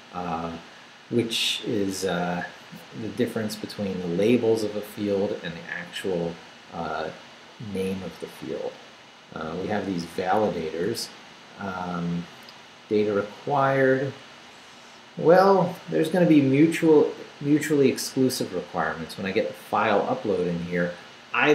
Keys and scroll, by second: 10.6 Right.